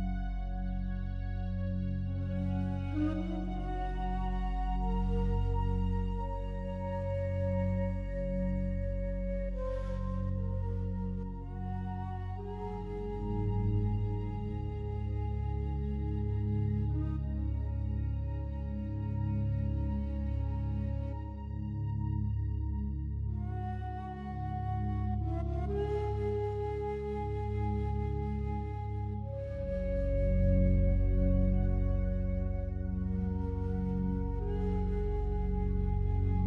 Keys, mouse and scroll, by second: 2.4 r, 5.8 right click, 7.6-10.2 alt+drag, 10.2-11.4 scroll down 1, 11.6-21.6 alt+drag, 23.2 ctrl+r, 24.3 click, 27.4 right click, 28.2-30.8 alt+drag, 30.8 ctrl+r, 31.3 click, 32.7 right click, 34.0 alt+shift+right click, 34.9 g, 35.1 g.